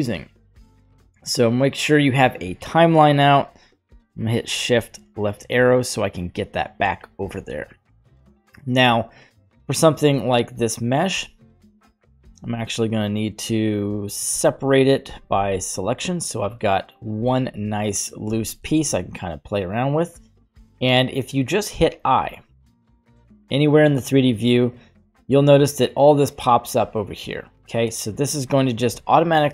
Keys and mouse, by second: 0.7-2.8 drag, 4.6 shift+Left, 8.0-8.6 middle drag, 11.2 Tab, 12.9 right click, 14.3 l, 15.1 p, 16.6 right click, 17.2 Tab, 18.3 r, 22.2 i.